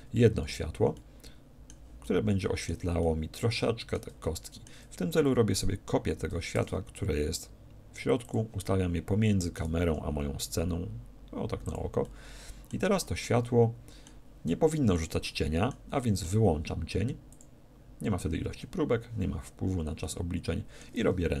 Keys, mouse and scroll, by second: 0.0 Escape, 0.9 middle click, 1.5 middle click, 2.2-6.1 middle drag, 5.5-7.2 right drag, 8.3-10.1 shift+drag, 8.6-10.5 shift+middle drag, 9.9 g, 11.7-13.6 drag, 12.0 middle click, 13.3-15.2 middle drag, 15.7-17.7 middle drag, 17.3-19.0 drag, 19.9-21.4 middle drag.